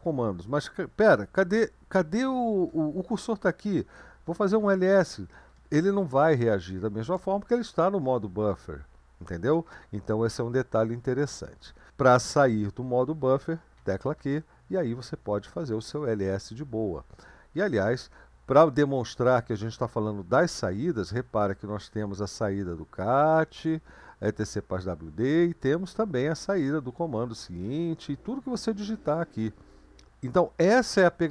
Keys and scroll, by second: 4.3-5.1 typing, 6.7 typing, 13.8 typing, 15.3-16.2 typing.